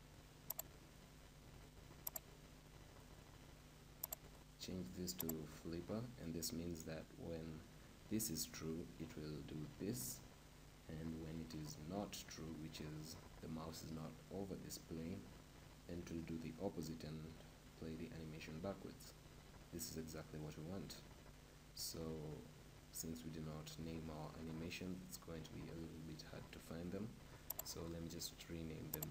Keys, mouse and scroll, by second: 4.0-8.2 drag, 27.7-29.1 drag.